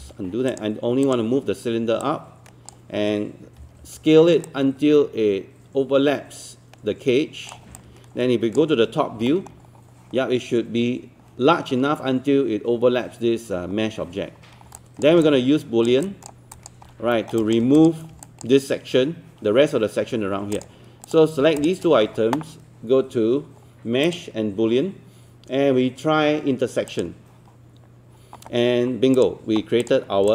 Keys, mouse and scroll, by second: 0.0 z, 0.5-3.2 drag, 3.6 e, 4.4-9.2 drag, 9.3 alt+middle click, 9.6-11.2 scroll up 1, 14.6 scroll down 1, 14.8 alt+click, 16.0 alt+click, 16.5 alt+click, 17.1 alt+middle click, 17.4 alt+click, 17.8 click, 18.2 alt+click, 21.6 shift+click.